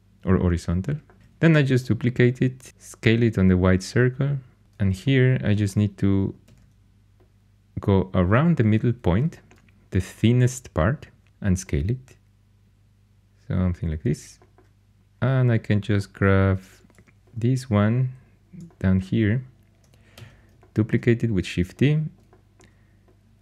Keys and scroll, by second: 1.2 shift+d, 2.7 s, 6.4 shift+d, 11.2 s, 16.9 2, 20.1 shift+d.